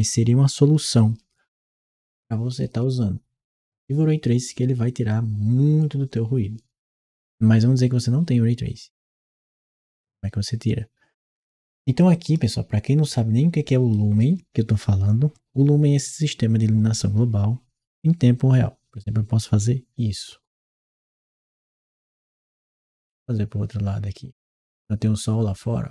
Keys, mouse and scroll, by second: 11.9-13.7 right drag, 15.8 right click.